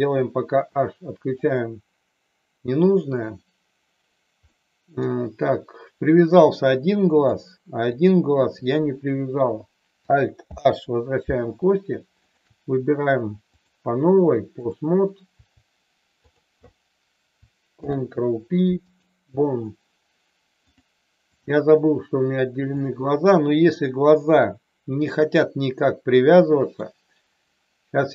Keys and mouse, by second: 1.4 click, 4.4-5.0 middle drag, 7.9 click, 10.4 alt+h, 12.2 shift+click, 13.4-14.7 drag, 16.3 click, 17.7 ctrl+p, 20.8 click, 22.7 click, 23.8 middle click, 25.4-26.8 middle drag.